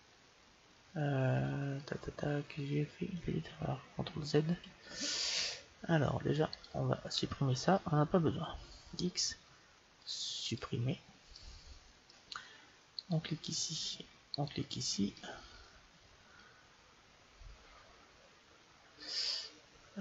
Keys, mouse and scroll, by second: 4.7 ctrl+z, 6.4-8.4 right drag, 8.7 x, 11.2-13.1 middle drag, 12.9-16.0 right drag, 15.0-16.9 middle drag.